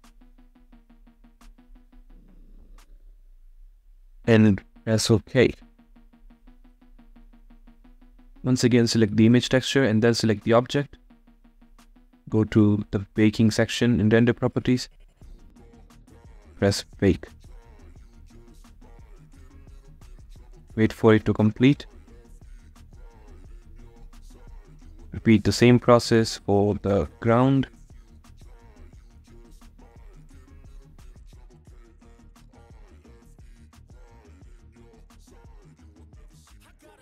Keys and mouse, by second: 27.0 click, 29.8 click, 31.2 click, 31.8 click.